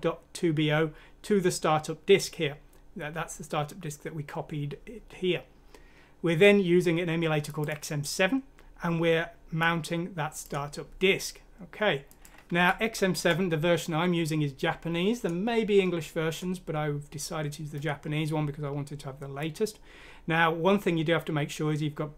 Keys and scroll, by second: 12.4 F6, 13.1 Return.